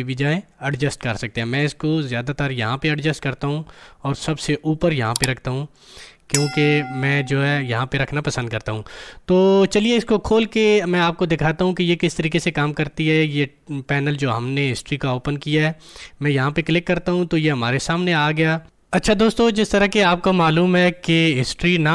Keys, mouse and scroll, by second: 16.3 click.